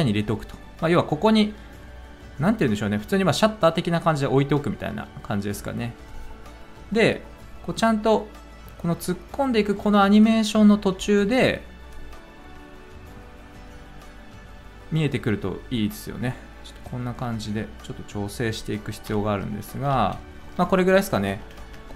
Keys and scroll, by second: 10.9 t, 19.0 alt+[, 19.9 ctrl+z, 21.5 space.